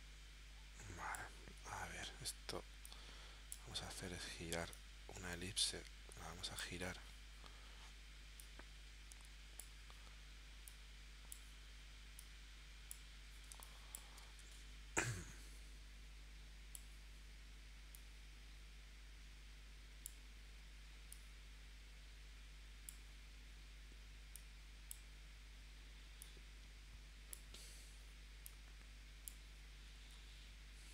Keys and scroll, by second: 13.5 space, 14.4 v.